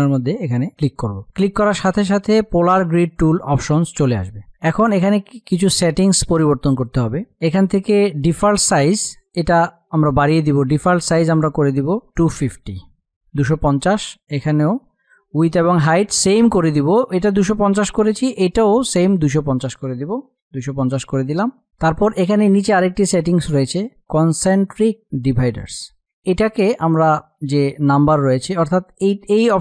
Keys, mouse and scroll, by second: 0.3-5.4 drag, 11.1-12.7 drag, 14.8-17.7 drag, 25.7-28.1 drag.